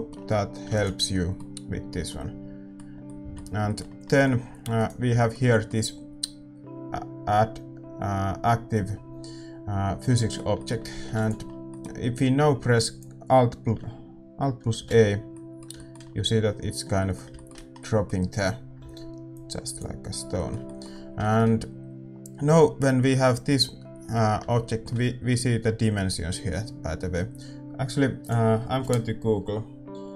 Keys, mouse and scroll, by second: 4.7-14.8 middle drag, 4.7-10.1 right drag, 12.7 ctrl+s, 12.7-14.8 drag, 14.8 alt+a, 19.3-21.1 drag, 21.1-24.8 middle drag.